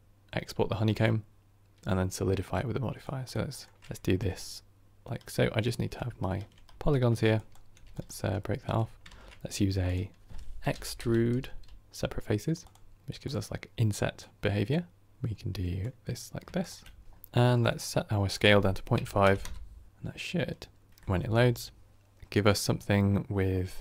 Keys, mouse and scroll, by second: 5.8 ctrl+right click, 6.7 shift+right click, 6.8 ctrl+right click, 17.0-19.3 scroll down 1, 19.3-23.8 drag.